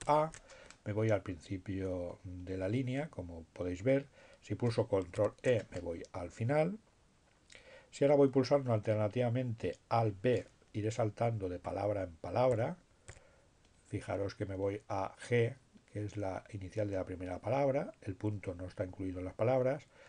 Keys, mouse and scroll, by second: 2.9 ctrl+e, 10.9 alt+b, 19.9 b.